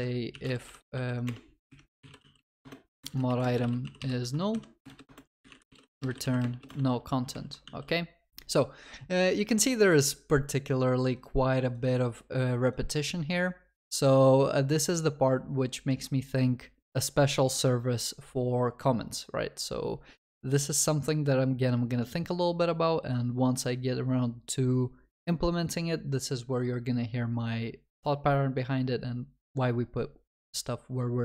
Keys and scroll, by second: 2.6 Return, 6.8 Return, 7.6 Return.